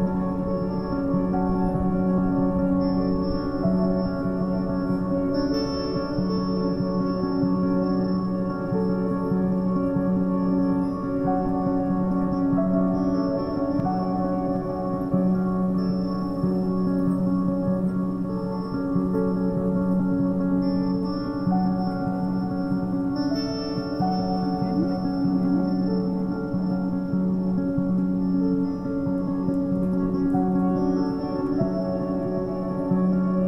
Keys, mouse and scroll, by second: 1.5-2.9 scroll down 5, 2.9 Tab, 3.3 scroll up 2, 4.1 g, 5.8 scroll down 4, 6.0 a, 6.2 a, 6.8 shift+middle click, 7.5 1, 7.8-8.2 scroll up 2, 8.2 click, 10.1 a, 10.3 a, 10.7-12.1 shift+scroll up 10, 10.8 shift+middle click, 12.1-12.5 scroll down 1, 12.5 3, 13.1 1, 13.9 z, 14.5 click, 15.1-15.5 scroll down 8, 15.8 g, 18.2 shift+middle click, 18.7-19.0 scroll up 8, 19.3 shift+middle click, 19.6-20.2 scroll up 6, 20.2 s, 23.2 scroll down 1, 23.5 middle click, 24.0 scroll down 1, 24.3-25.8 typing, 24.7 scroll up 1, 25.3 Tab, 26.2 shift+middle click, 26.7 scroll down 1, 26.9 a, 27.0 click, 27.1 a, 27.5 click, 28.4 shift+click, 29.1 KP_1, 29.8 scroll up 5, 30.6-31.0 scroll up 2, 31.0 shift+middle drag, 31.3 scroll up 3, 31.8 g, 33.2-33.4 scroll down 8.